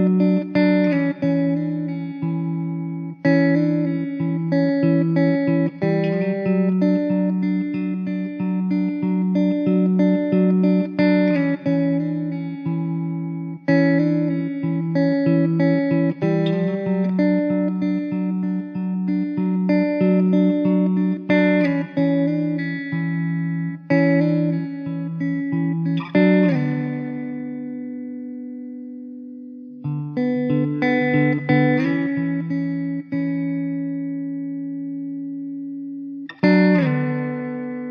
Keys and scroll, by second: 0.1 Down, 8.3-10.2 typing, 15.1-17.6 typing, 19.5-22.9 typing.